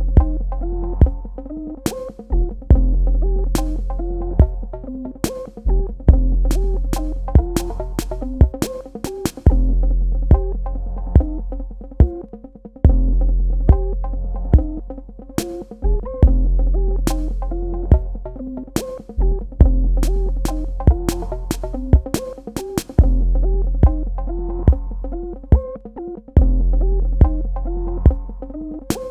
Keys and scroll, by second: 0.3 space, 20.7 space.